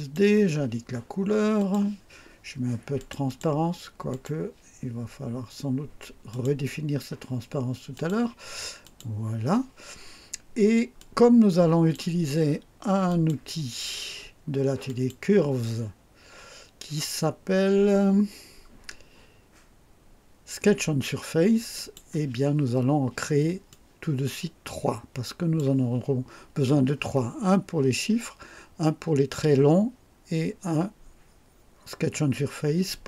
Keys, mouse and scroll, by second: 1.5 click, 2.9 click, 4.1 click, 6.3 click, 7.9 click, 8.8 click, 10.9-12.1 drag, 13.0 click, 14.8 click, 21.7 click, 23.7-25.7 drag.